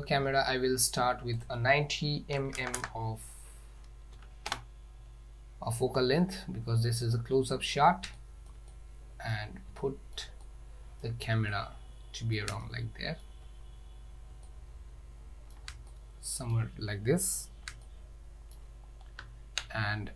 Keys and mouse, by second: 1.6-5.2 drag, 2.8 KP_0, 6.3-7.8 ctrl+middle drag, 8.2-8.5 shift+middle drag, 8.7 middle click, 9.9 shift+middle click, 10.5 middle click, 11.6-12.4 ctrl+middle drag, 12.7-13.3 shift+middle drag, 14.5-15.6 ctrl+middle drag, 16.0-16.6 shift+middle drag, 17.9-18.6 shift+middle drag, 19.3 z.